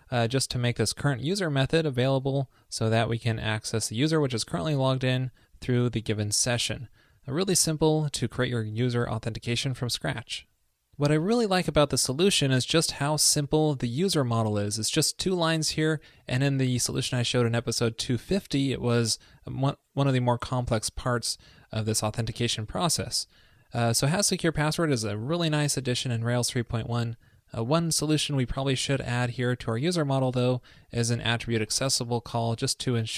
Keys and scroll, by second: 8.9 super+s, 30.5 super+v.